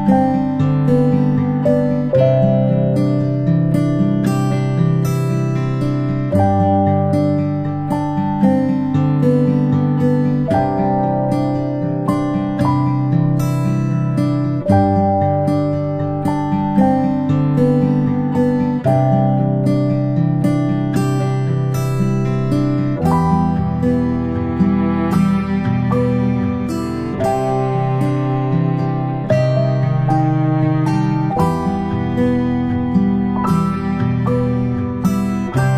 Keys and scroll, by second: 6.2 ctrl+z.